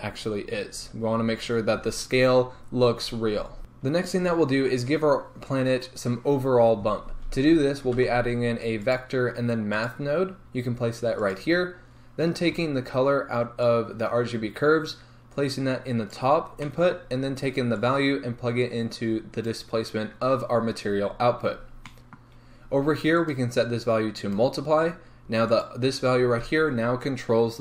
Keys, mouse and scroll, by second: 0.4-0.9 scroll down 1, 1.0-3.6 scroll down 1, 3.6-13.7 middle drag, 13.7 drag, 17.8 drag, 21.4 scroll up 1, 24.4-27.6 drag.